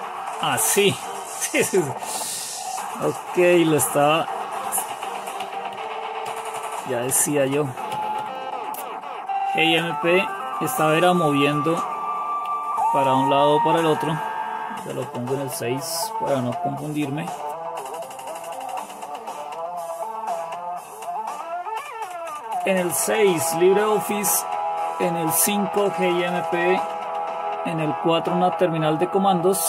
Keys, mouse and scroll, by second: 3.3 super+Left, 3.8 super+Right, 4.8 super+Left, 5.4 super+Right, 5.8 super+Left, 6.5 super+Right, 6.6 super+Left, 7.2 super+Right, 7.5 super+Left, 8.3 super+Left, 9.8 super+Right, 11.6 shift+super+Left, 12.6 shift+super+Right, 16.5 super+&, 21.5 super+6, 24.8 super+5, 27.1 super+4.